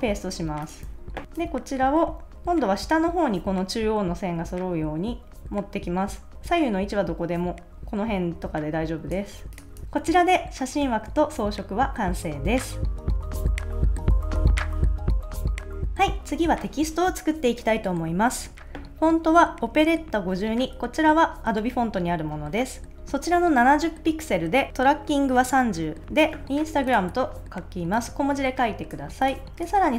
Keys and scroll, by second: 0.8 super+s, 9.8 super+s.